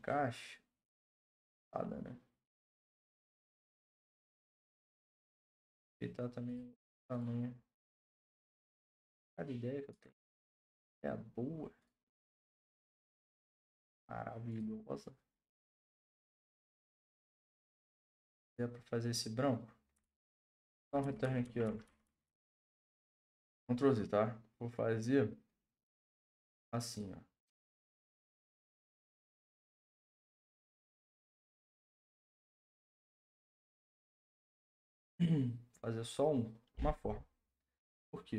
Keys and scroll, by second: 20.0 ctrl+z, 20.2 ctrl+z, 20.4 ctrl+z.